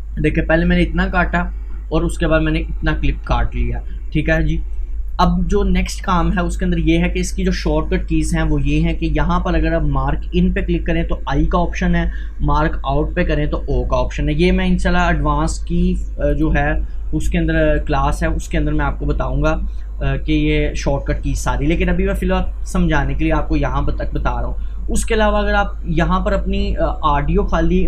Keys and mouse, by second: 6.2 Delete, 7.0-9.9 drag, 16.3 click, 19.5-27.8 drag.